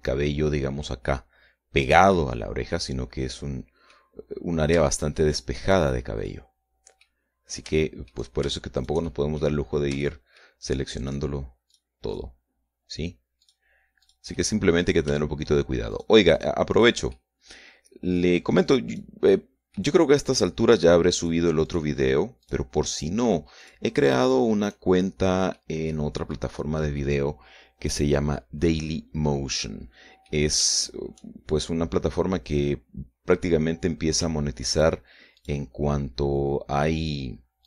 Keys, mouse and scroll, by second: 0.4 middle click, 2.6-4.6 middle drag, 5.8 shift+right click, 6.4 shift+scroll down 1, 6.8-7.8 middle drag, 7.8 scroll up 2, 8.3 shift+middle click, 9.3 shift+right click, 10.2 shift+scroll up 2, 10.6 shift+middle click, 11.6 shift+right click, 12.2 shift+right click, 12.6 shift+right click, 14.0 shift+right click, 14.6 shift+right click, 14.9 shift+middle click, 16.5 shift+right click, 16.9 shift+right click, 17.3 shift+right click, 17.7 shift+middle click, 18.7 shift+right click, 19.1 shift+right click, 19.4 shift+right click, 19.8 shift+middle click, 20.8 shift+right click, 21.2 shift+right click, 21.8 shift+right click, 22.2 shift+right click, 23.0 shift+right click, 23.5 shift+right click, 24.2 shift+right click, 24.8 shift+right click, 25.4-25.8 shift+scroll down 1, 26.1 middle click, 27.6-31.0 middle drag, 32.3 scroll down 1, 32.7-34.1 middle drag, 34.2-34.5 scroll up 1, 35.3 shift+right click, 36.0 shift+right click.